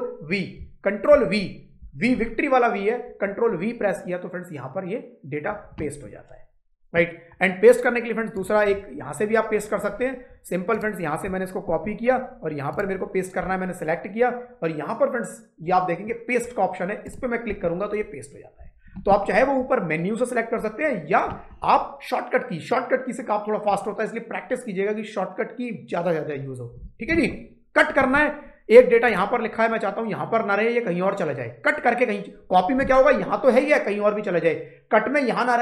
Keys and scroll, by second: 1.0 ctrl+v, 11.5 ctrl+c.